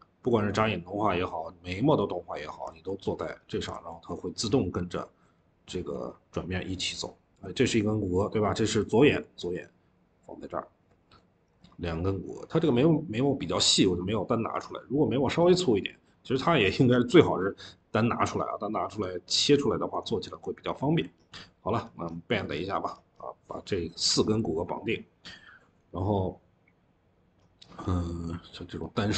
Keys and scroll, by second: 2.6 ctrl+z, 3.6 ctrl+z, 24.2 Escape.